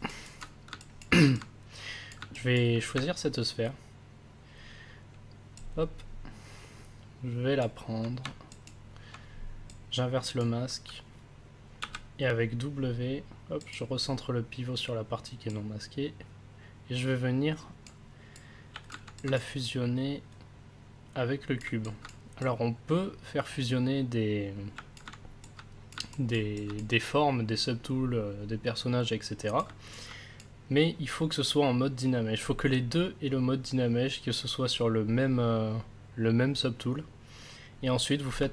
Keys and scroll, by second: 11.8 w.